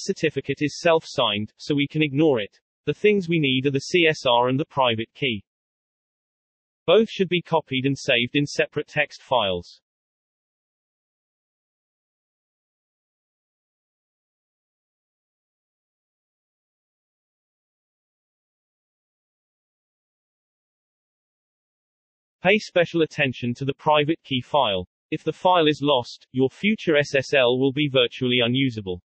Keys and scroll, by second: 14.9-15.9 typing, 16.0 Return, 16.6 Return, 17.8 ctrl+v.